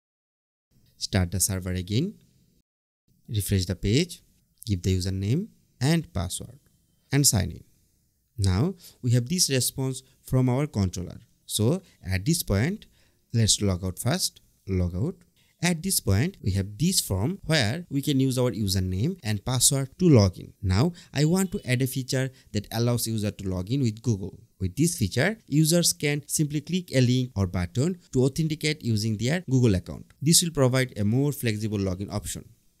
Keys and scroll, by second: 3.2 super+r, 5.6 Tab, 13.1 BackSpace, 13.3 Return.